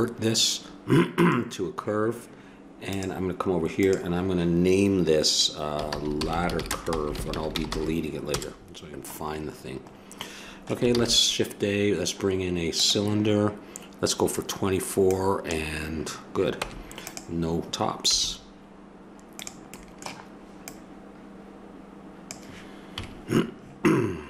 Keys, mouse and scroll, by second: 2.9-5.6 drag, 6.3 d, 10.9 shift+a, 15.1-17.2 drag, 16.6 Tab, 18.1 s, 20.6-22.5 drag, 22.9 KP_Decimal.